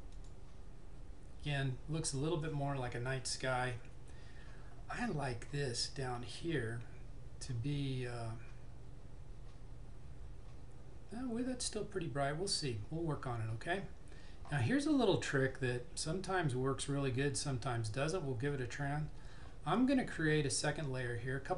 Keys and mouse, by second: 0.3 click.